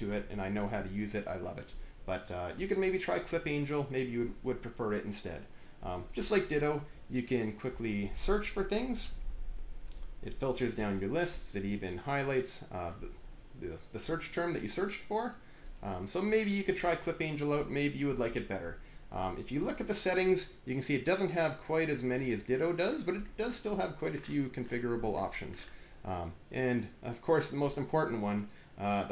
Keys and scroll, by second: 8.5-9.5 typing.